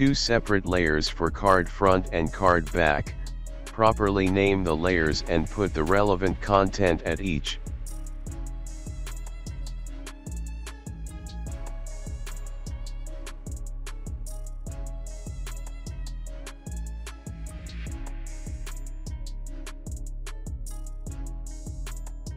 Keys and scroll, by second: 1.8-6.0 typing, 7.7 Return, 14.5-17.8 typing.